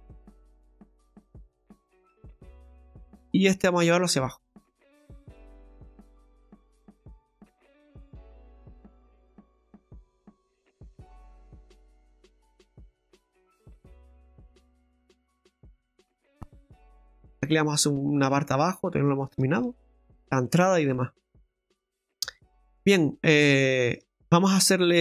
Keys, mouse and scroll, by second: 0.9 click, 2.5 shift+middle click, 4.2 right click, 5.9 click, 7.4 shift+middle click, 9.2-9.7 scroll down 2, 9.9 click, 11.4 click, 12.5 click, 13.5 click, 18.2-18.8 scroll down 4, 18.8 middle click, 19.3 shift+middle click, 19.7-20.5 scroll up 6, 20.4 middle click, 20.9 shift+middle click, 22.4 Tab, 23.1 middle click, 23.6 shift+middle click.